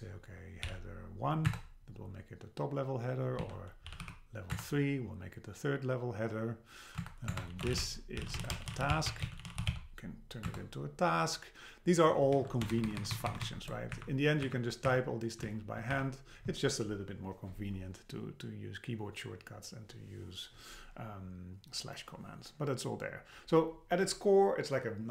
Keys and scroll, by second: 1.5 Return, 4.5 Return, 7.0 Return, 7.6 Return, 10.5 Return, 12.3 super+Left, 12.7 shift+Right, 13.9 Up, 14.9 Up, 15.4 Down, 15.9 BackSpace.